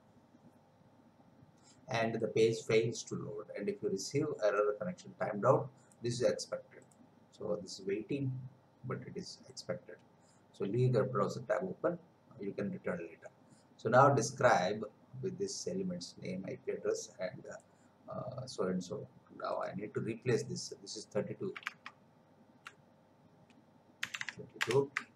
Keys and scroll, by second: 21.9 alt+Tab, 24.0 3, 24.6 Return.